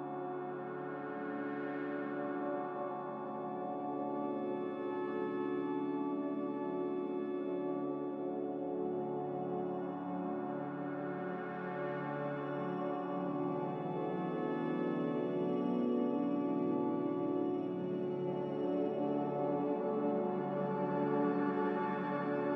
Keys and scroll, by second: 11.4 Caps_Lock, 11.9 a, 17.0 q, 18.2 q, 20.4 Caps_Lock.